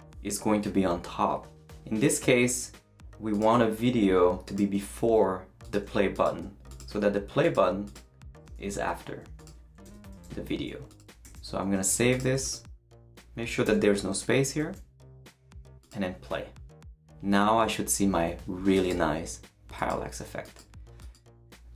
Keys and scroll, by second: 8.7 shift+super+x, 9.5 super+x, 9.8 Return, 10.1 super+v, 11.3 super+s, 13.6 shift+BackSpace, 14.2 BackSpace, 14.6 super+s.